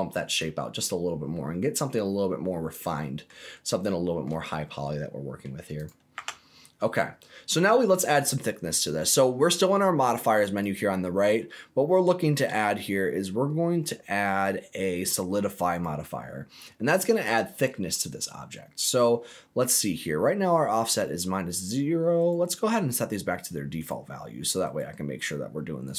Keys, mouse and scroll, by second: 0.3-3.3 middle drag, 3.8 shift+middle click, 4.5 middle click, 5.7 click, 6.1 Tab, 7.0-7.3 scroll up 1, 7.3 scroll down 2, 7.6 middle click, 10.4-15.8 drag, 16.5 scroll up 1, 16.6 middle click, 17.1-17.5 scroll up 2, 17.5 middle click, 18.7 middle click, 18.8-20.0 scroll down 4, 22.1-23.9 right drag, 24.6-25.9 right drag.